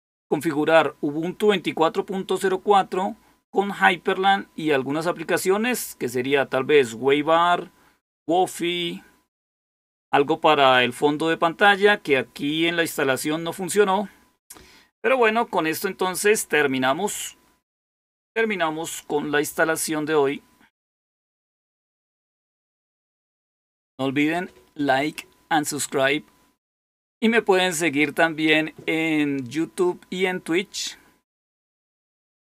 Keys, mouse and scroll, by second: 17.0 click, 32.4 click.